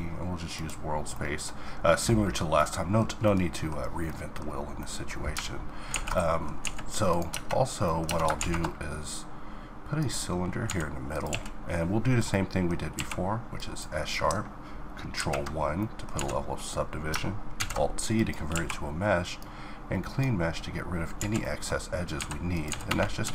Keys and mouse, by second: 5.7 alt+a, 6.2 a, 6.7 right click, 6.9 Tab, 7.7 Tab, 8.0 shift+a, 10.3 s, 10.9 q, 12.5 q, 14.8 ctrl+1, 15.7 z, 17.1 alt+c, 18.1 q, 20.8 z, 21.7 s, 22.3 s.